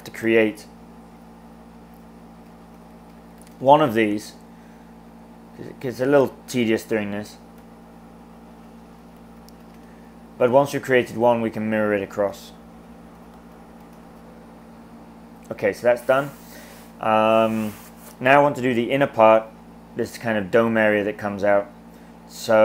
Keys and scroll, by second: 0.3 e, 2.2-3.8 typing, 7.7-10.0 typing, 12.2-14.2 typing.